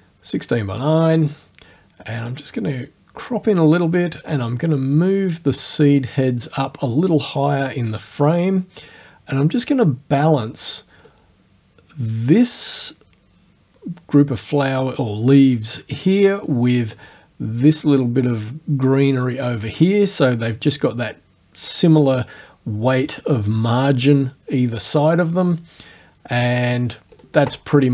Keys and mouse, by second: 1.2-3.4 drag, 4.2-11.3 drag, 27.2 click, 27.6 click.